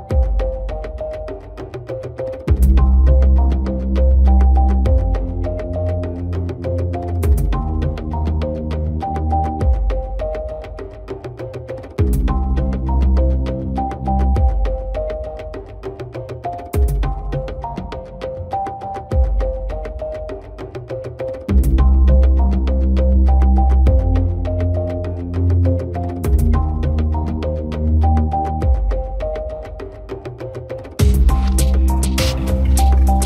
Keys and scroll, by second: 11.2 Delete, 13.9 ctrl+d, 16.6 Delete.